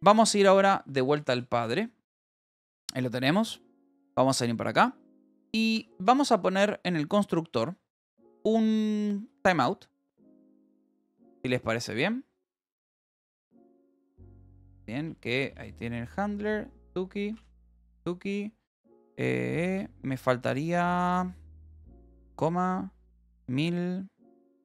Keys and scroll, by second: 0.2-3.2 typing, 4.3-6.2 typing, 7.9 ctrl+g, 9.1-11.2 typing, 12.5 Return, 13.7 Escape, 14.1 l, 15.5 a, 16.3 space, 17.9 ctrl+g, 18.7 Down, 20.1 ctrl+g, 20.4 BackSpace, 22.0 ,, 23.8 ctrl+g.